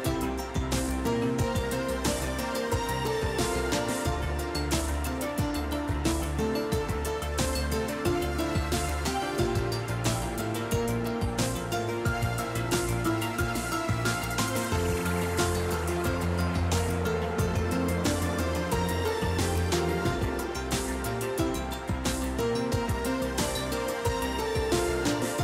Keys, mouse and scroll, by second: 0.0-5.7 drag, 8.4 0, 11.1-13.6 drag, 15.9 F12.